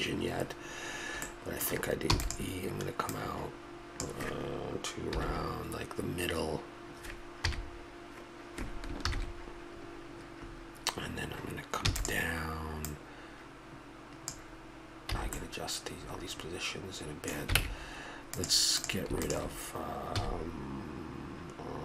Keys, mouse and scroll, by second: 1.2 click, 2.1 middle click, 2.1 e, 3.1-5.0 drag, 5.1 KP_7, 7.4 KP_3, 11.8 e, 12.8-14.7 drag, 15.1 a, 15.5 middle click, 16.4-17.6 middle drag, 17.6 ctrl+Tab, 18.8-20.2 right drag, 20.2 x.